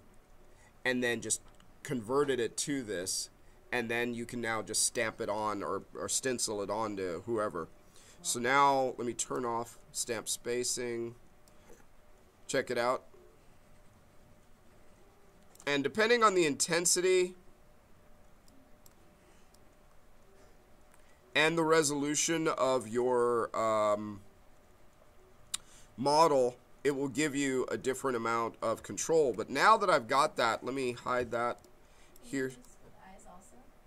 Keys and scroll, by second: 16.1 ctrl+z, 29.2 1, 30.9 q.